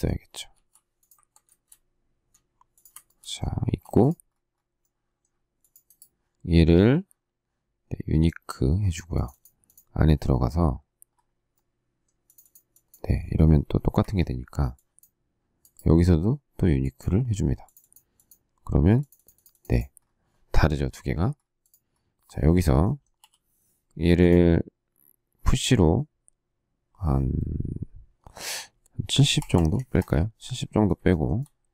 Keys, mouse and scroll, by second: 0.4 m, 2.7 shift+click, 3.5 space, 13.9 Escape, 23.1 p, 29.1-30.0 typing, 31.1 shift+middle click, 31.3 shift+middle click.